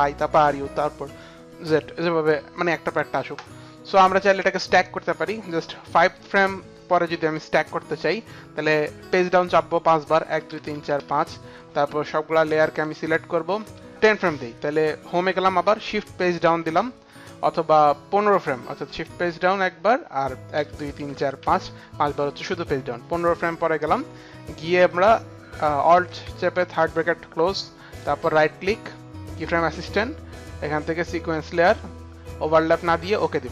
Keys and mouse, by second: 4.2 click, 10.3 Page_Down, 10.8 Page_Down, 11.3 Page_Down, 12.4 Page_Down, 12.4 click, 13.5 shift+click, 13.9 Home, 13.9 ctrl+z, 13.9 click, 15.6 Home, 16.2 shift+Page_Down, 16.2 Home, 17.5 Home, 20.5 Page_Down, 21.2 Page_Down, 27.9 right click, 31.3 click, 33.1 click.